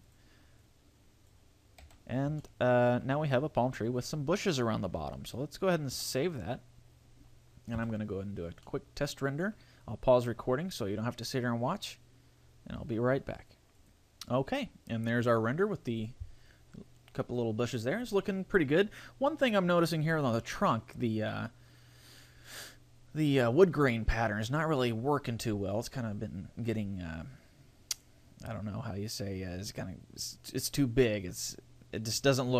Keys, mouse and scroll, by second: 0.1 click, 0.6 click, 1.8 a, 2.2 scroll down 1, 2.4 shift+middle click, 7.4 ctrl+s.